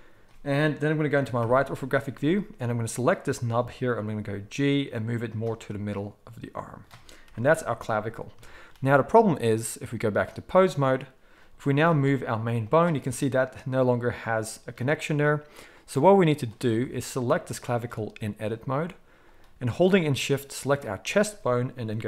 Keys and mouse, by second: 1.4 KP_3, 3.0-9.5 middle drag, 4.1 g, 7.2 KP_1, 9.5-11.5 drag, 11.5-15.8 middle drag, 11.7 g, 15.8-17.5 drag, 17.5-19.2 middle drag, 19.2 click, 19.3-22.0 middle drag.